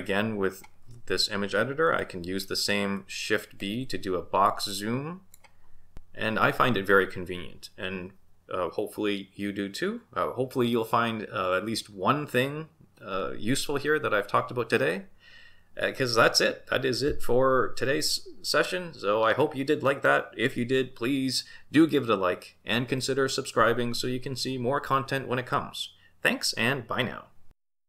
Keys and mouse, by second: 3.6 shift+b.